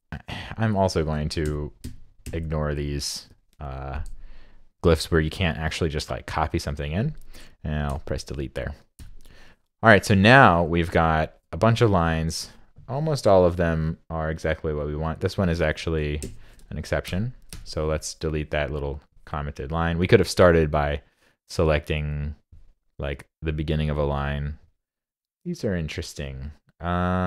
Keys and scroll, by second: 16.2 shift+super+Left.